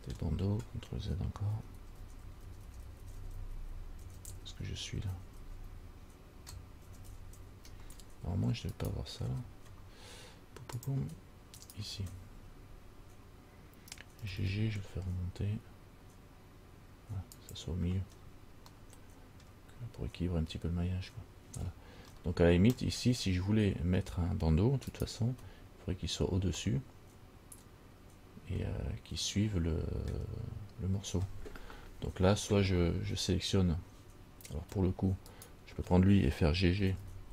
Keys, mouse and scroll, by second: 0.0 middle click, 1.8 ctrl+z, 2.0 ctrl+z, 2.2 ctrl+z, 2.4 ctrl+z, 2.7 ctrl+z, 2.9-4.0 ctrl+z, 4.3 ctrl+z, 4.5 ctrl+z, 4.8 ctrl+z, 5.3 ctrl+z, 5.6 ctrl+z, 7.1 ctrl+z, 7.3 ctrl+z, 7.6 ctrl+z, 9.0 alt+right click, 11.0 click, 11.8 alt+right click, 14.4 g, 18.3-18.9 scroll down 3, 19.0 middle click, 21.3-22.0 scroll up 3, 22.4 middle click, 25.2 alt+right click, 26.9 middle click, 35.5 alt+right click, 37.0 g.